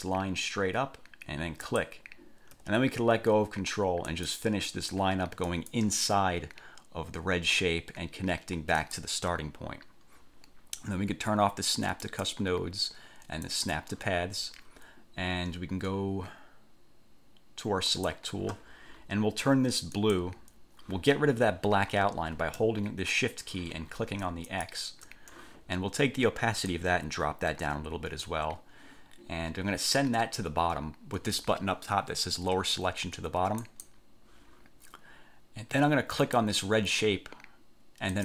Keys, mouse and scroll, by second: 1.8 ctrl+click, 4.3 click, 5.6 click, 8.9 click, 12.2 click, 13.6 click, 18.1 click, 20.1 click, 24.7 shift+click, 26.9-28.6 drag, 33.8 click, 36.3 click.